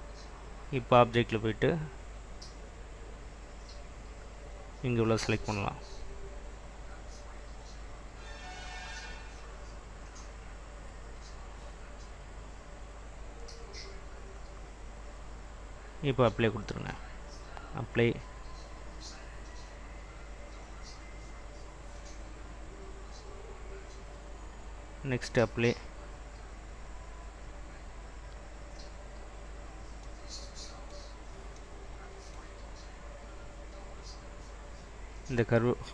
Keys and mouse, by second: 7.6-14.4 drag, 16.0-23.4 drag, 24.9-29.3 drag.